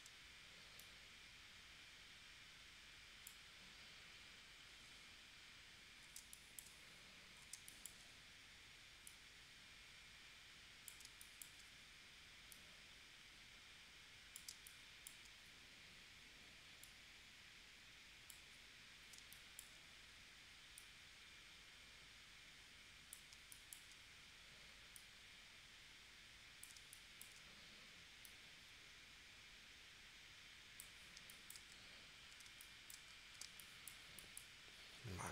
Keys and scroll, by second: 6.2 space, 7.5 space, 11.1 space, 14.5 space, 19.2 space, 23.4 space, 26.8 space, 31.2 space, 32.5 space, 33.6 space.